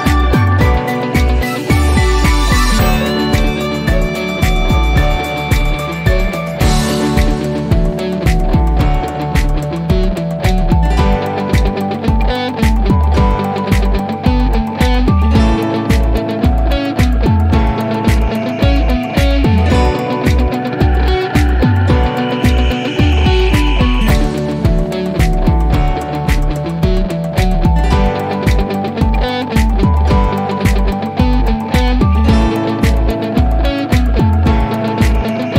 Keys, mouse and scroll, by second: 1.0 click, 4.4-5.4 drag, 10.3-11.0 drag, 12.0 1, 12.9 Return, 16.8 click, 17.6-18.0 scroll down 1, 18.7-19.4 click, 19.9-21.3 scroll up 1, 22.8 click, 25.2-27.5 drag, 27.9-28.5 scroll up 1, 28.5 click, 29.8 right click, 32.0-35.0 drag.